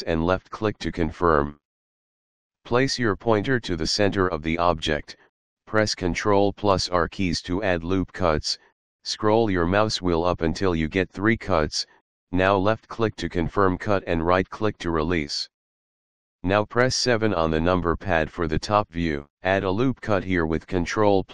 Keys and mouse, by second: 0.4 click, 7.1 ctrl+r, 11.0 click, 13.3 right click, 17.0 KP_7, 21.2 ctrl+r.